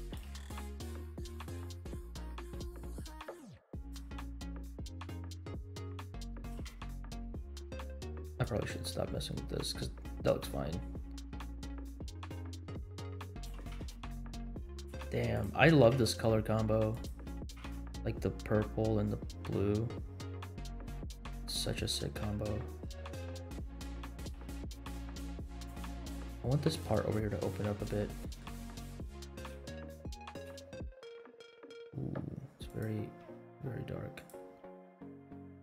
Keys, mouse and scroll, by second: 0.2 g, 1.7 r, 3.3 g, 4.3 middle click, 4.5 g, 6.5 g, 10.1-10.8 scroll up 4, 11.2-11.8 scroll down 3, 12.4 r, 13.5 g, 14.9 g, 15.7 r, 17.3 g, 23.0 g, 24.4 r, 25.7 r, 26.0 g, 27.8 middle click, 28.8 g, 29.7 s, 30.4 g, 33.2 s, 34.6 g.